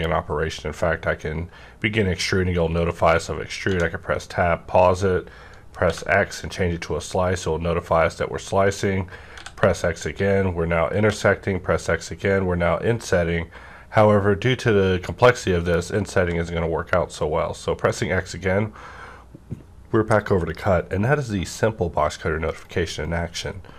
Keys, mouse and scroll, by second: 3.7 Tab, 3.7-5.8 drag, 3.7 -, 5.8 x, 9.3 x, 16.2 x, 22.5 right click, 22.5 x.